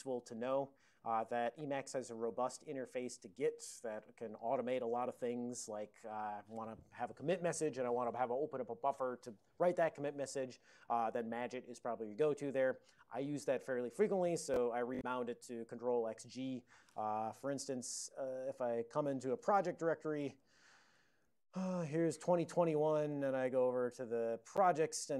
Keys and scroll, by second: 17.8 ctrl+x, 18.4 d, 19.5-20.9 typing, 20.9 Return, 21.4 ctrl+d, 23.3-23.6 typing, 24.6 Return.